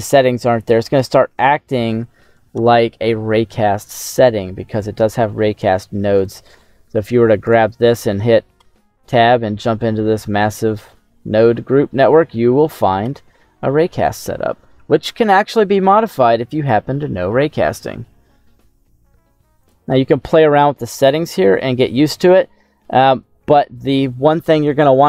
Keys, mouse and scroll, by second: 0.1 middle click, 4.7 click, 6.1 right click, 6.8-7.4 scroll down 2, 7.4 right click, 8.5 Tab, 9.0-11.4 scroll down 18, 11.4-13.0 scroll up 8, 13.0 Tab, 15.1-15.9 scroll up 6, 15.9 middle click, 16.9-17.6 scroll up 3, 17.6 middle click, 20.6-22.3 middle drag.